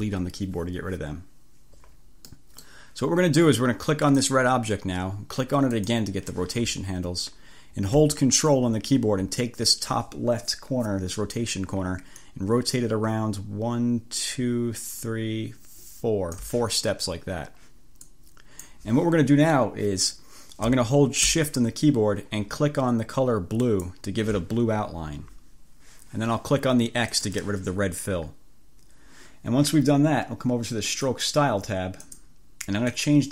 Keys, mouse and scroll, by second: 2.4 click, 4.1 click, 5.9 click, 12.2-16.7 drag, 18.1 click, 23.7 click, 27.2 click, 31.1 click, 32.2 click, 33.0 click.